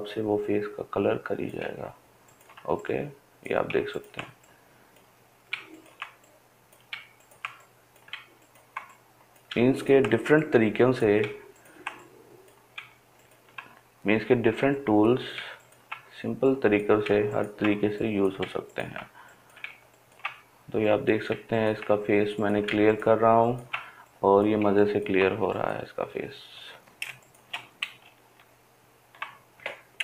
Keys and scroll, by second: 27.3 ctrl+space.